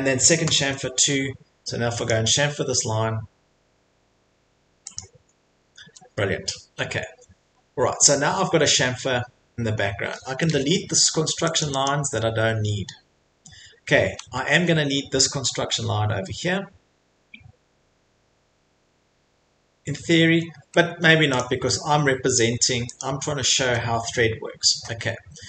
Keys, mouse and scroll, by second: 0.3 Return, 2.1 click, 2.9 Return, 5.0 click, 5.3 middle click, 5.5 scroll, 5.8 Escape, 5.8 middle click, 6.5 middle click, 7.5 middle click, 7.6 middle click, 9.3 middle click, 9.3 middle click, 9.4 middle click, 9.7 middle click, 9.8 middle click, 9.9 middle click, 10.4 middle click, 10.9-11.5 scroll, 11.6 middle click, 11.6 click, 11.8 click, 12.3 middle click, 14.5 Escape, 15.0 middle click, 15.1 middle click, 15.7 middle click, 19.7 middle click, 20.0 middle click, 20.9 Escape, 21.4 click, 23.0 click, 23.6 Delete, 24.4 middle click, 24.6 middle click, 25.0 middle click.